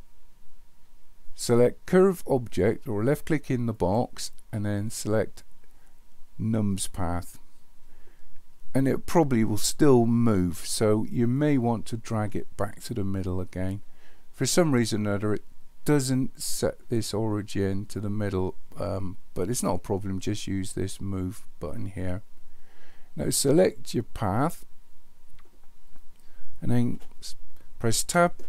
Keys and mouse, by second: 3.7-6.9 drag, 11.5-14.8 drag, 24.4 click, 28.0 Tab.